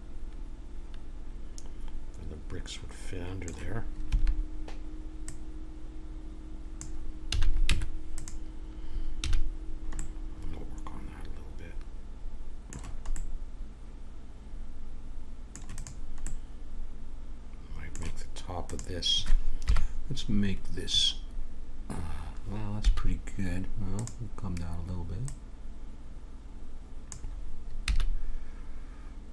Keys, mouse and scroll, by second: 4.0 a, 5.2-7.0 drag, 7.3 a, 7.7 Tab, 8.1-9.8 drag, 9.2 a, 9.9 click, 10.1 middle click, 13.1-14.9 middle drag, 15.7 click, 16.3-18.7 middle drag, 18.7-19.7 drag, 19.6 KP_1, 20.3-23.9 middle drag, 22.7 a, 23.9-26.9 drag, 26.9 right click, 27.8 a.